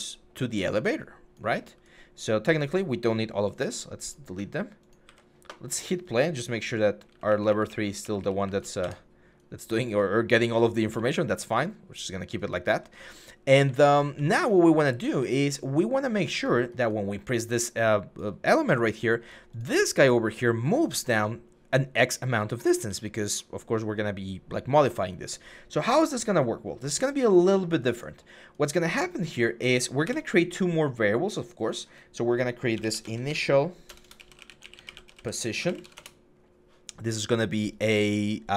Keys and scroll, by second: 1.4 a, 3.3 Delete, 3.6 Delete, 4.2 Delete, 4.9 Delete, 6.6-10.3 typing, 8.6 Escape, 11.6-15.0 typing, 22.3-22.6 typing, 29.9 Delete, 32.6-36.0 typing.